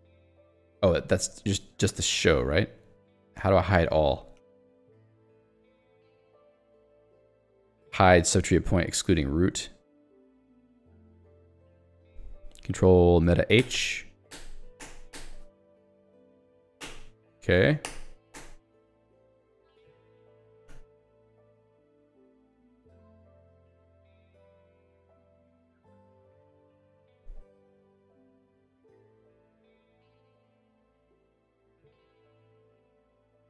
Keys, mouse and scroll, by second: 0.2 ctrl+g, 1.3 k, 2.5-4.4 typing, 6.6 k, 9.9 j, 13.6 ctrl+alt+h, 15.5 k, 16.9 ctrl+alt+h, 20.7 ctrl+s, 21.2 j, 21.6 ctrl+d, 22.9 ctrl+u, 23.3 ctrl+d, 23.9 ctrl+g, 25.1 click, 25.3 q, 25.6 Escape, 26.0 j, 26.7 k, 29.3 ctrl+d.